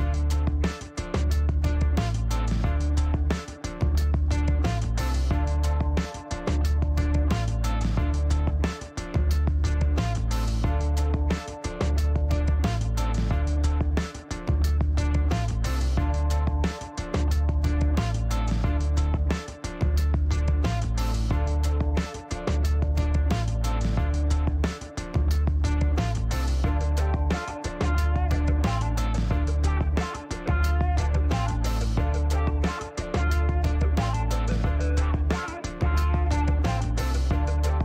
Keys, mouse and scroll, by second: 0.5 shift+right click, 1.8-2.4 scroll up 4, 3.0 middle click, 5.6 click, 7.3 click, 8.3-9.7 middle drag, 11.0 click, 12.5 click, 14.2 click, 14.8 right click, 16.3 click, 17.1 click, 18.7 click, 23.0 click, 24.6 click, 26.5 KP_2, 26.7 KP_5, 27.3 KP_Enter, 28.3 scroll down 2, 28.6-29.1 middle drag, 29.1 scroll up 2, 30.0-31.0 drag, 31.9 click, 33.8 middle click, 35.3 click, 37.4 click.